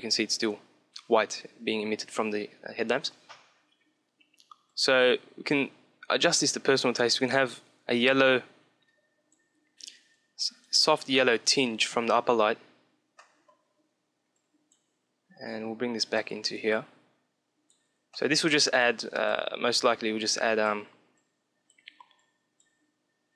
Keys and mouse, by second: 4.6-6.6 drag, 13.0 middle click, 14.0-17.9 drag, 17.9 middle click, 18.8-23.3 drag.